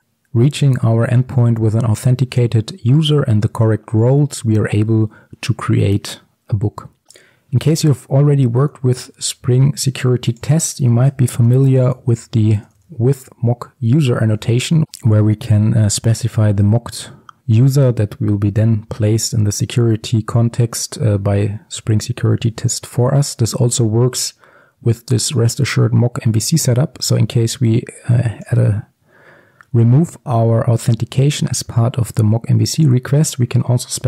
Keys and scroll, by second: 13.9 Return, 14.8 ctrl+z.